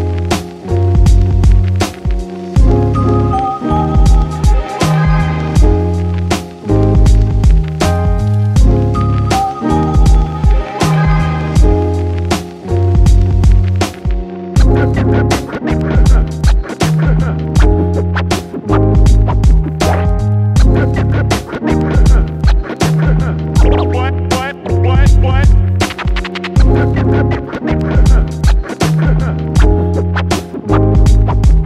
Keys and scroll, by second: 3.0 Delete, 7.8-9.0 typing, 10.7 Return.